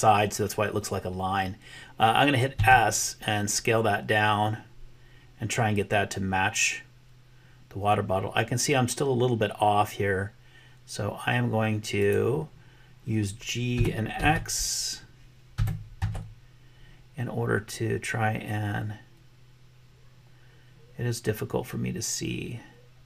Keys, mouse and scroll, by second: 2.7 s, 13.7 g.